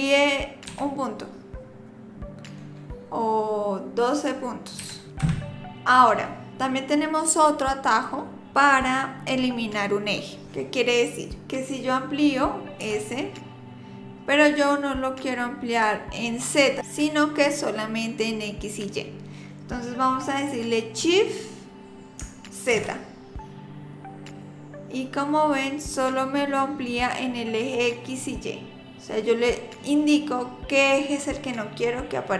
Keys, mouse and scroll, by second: 12.8 s.